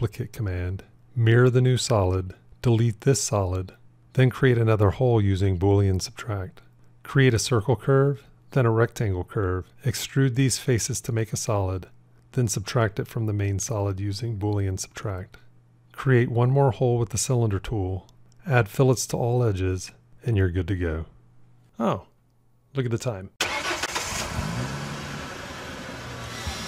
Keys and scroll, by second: 1.0 alt+x, 5.9 q, 13.7 q.